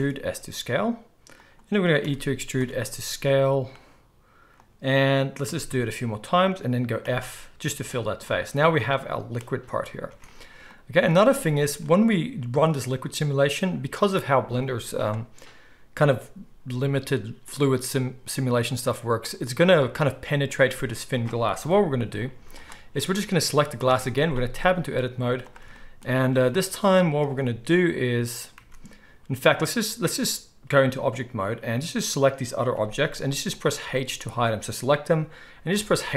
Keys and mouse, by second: 1.4-11.0 middle drag, 2.0 e, 5.4 e, 7.0 f, 10.4 Tab, 11.1 alt+a, 12.7 click, 18.9-21.6 drag, 21.6-28.3 middle drag, 21.6 KP_1, 22.3 z, 23.8 Tab, 25.1 z, 28.6 Tab, 32.0 click, 32.7 h, 33.1 h, 33.5 click, 33.8 h, 34.3 click, 35.8-36.1 middle drag, 35.8 h.